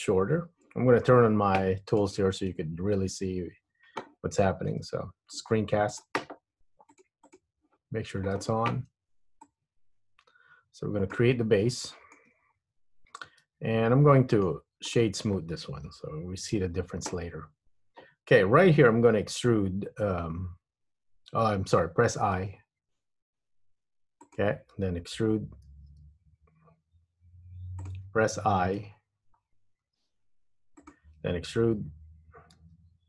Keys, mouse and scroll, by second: 8.5 n, 9.6 click, 11.6 scroll up 2, 12.0 shift+middle click, 12.6-13.4 scroll up 2, 13.9 Tab, 14.4 right click, 16.7 Tab, 22.5 i, 25.9 e, 29.5-30.0 scroll up 1, 30.0 i, 32.7 e.